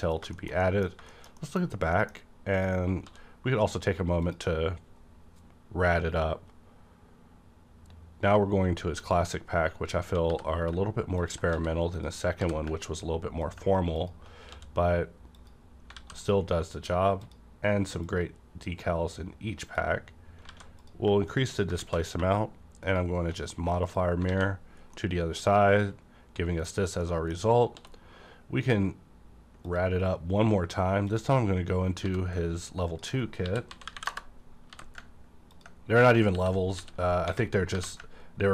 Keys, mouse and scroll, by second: 0.0 shift+middle click, 0.3 middle click, 0.6 middle click, 1.1 shift+middle click, 1.4 shift+middle click, 1.7 scroll up 1, 1.9 middle click, 2.5 click, 3.0 d, 4.2 click, 9.0 click, 10.3 g, 11.2 click, 11.5 ctrl+s, 11.9 click, 12.4 g, 13.4 ctrl+click, 14.0 ctrl+click, 14.5 d, 15.3 click, 15.9 alt+a, 16.2 click, 17.2-20.8 drag, 18.3-20.5 drag, 20.5 alt+a, 21.3 click, 21.8 x, 22.8 shift+click, 23.8 shift+click, 24.3 alt+a, 24.7 scroll down 1, 24.9-26.8 middle drag, 26.7 scroll down 1, 27.0 middle click, 27.5 scroll up 1, 27.7 d, 29.6 click, 31.1 click, 32.0 g, 32.9 click, 33.4-34.7 typing, 34.0 KP_Enter, 35.5 click, 35.5 click, 36.3 alt+r, 36.3 click, 37.7 typing.